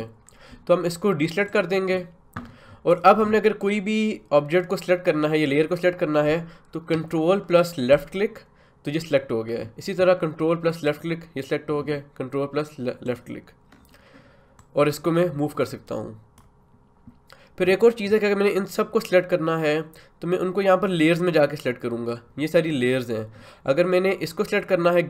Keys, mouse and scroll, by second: 1.5 click, 7.9 ctrl+click, 10.9-24.5 ctrl+drag.